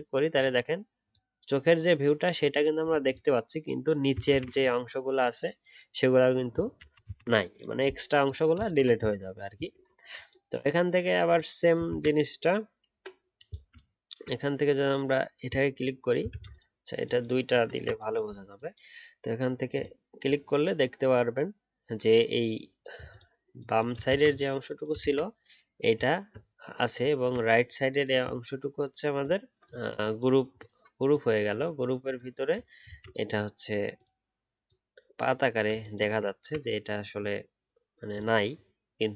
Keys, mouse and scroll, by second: 4.2 ctrl+z, 6.8 ctrl+z, 11.9 ctrl+z, 13.7 alt+click, 16.2 ctrl+z, 24.0 ctrl+z, 25.0 ctrl+z, 26.1-27.1 alt+scroll up 1, 27.2-30.1 alt+scroll up 1, 32.8 ctrl+z, 36.3-39.1 alt+scroll down 1.